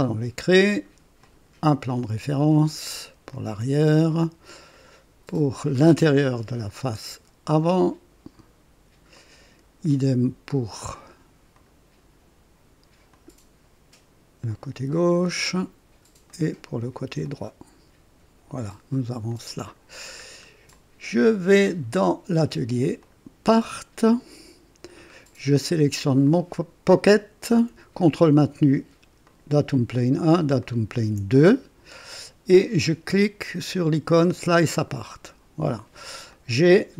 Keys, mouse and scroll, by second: 1.1 click, 2.5 click, 3.3-4.1 drag, 4.7 click, 7.5 click, 9.1 click, 9.8-10.7 drag, 11.5 click, 13.0 click, 14.4 click, 15.2 click, 16.2 click, 17.2 click, 18.5 click, 19.3 click, 20.2 scroll down 1, 20.7-21.9 drag, 23.0 click, 24.0 click, 25.2 scroll down 1, 26.2 click, 29.2 ctrl+click, 30.6 ctrl+click, 33.5 click, 34.7 click, 36.2-36.9 drag.